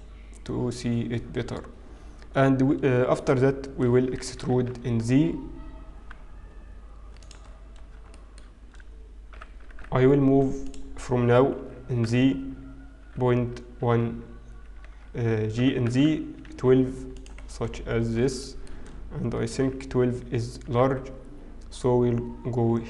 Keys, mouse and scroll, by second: 1.7-3.1 scroll up 1, 3.1-5.7 scroll up 1, 5.7 e, 7.5-8.9 scroll down 3, 8.9 shift+middle click, 8.9-11.3 scroll down 1, 11.5 g, 12.9 g, 18.0-20.9 scroll down 7, 18.0 g, 20.9 shift+middle click, 20.9-21.7 scroll up 4, 20.9 g.